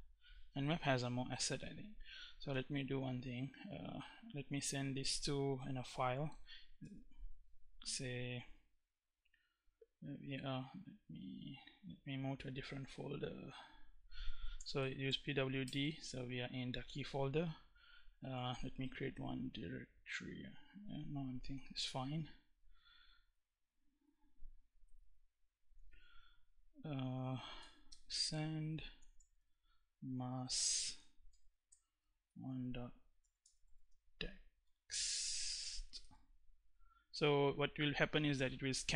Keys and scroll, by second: 2.1 Up, 6.4 space, 11.1 BackSpace, 13.9-15.2 typing, 15.3 Return, 21.5 Up, 23.0 Down, 24.5 Up, 27.2-29.5 typing, 30.9-34.3 typing, 35.3 x, 35.6 t.